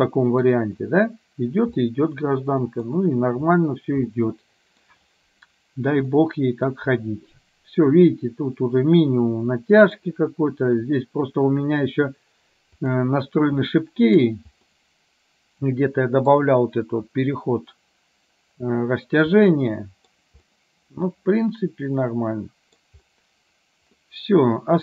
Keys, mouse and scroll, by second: 2.0-3.0 middle drag, 4.3 middle click, 6.3 middle click, 9.4 middle click, 12.9 click, 13.8 middle click, 14.8-16.4 middle drag, 19.5 middle click, 20.5-22.9 middle drag, 24.1-24.8 middle drag.